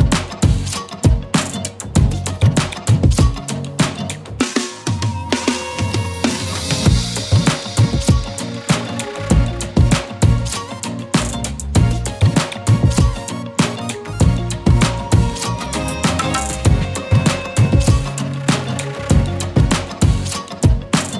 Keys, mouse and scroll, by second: 1.0 click, 4.7 click, 10.2 scroll down 1, 14.6 click, 15.3 right click, 16.3 click, 17.6-18.9 alt+shift+click.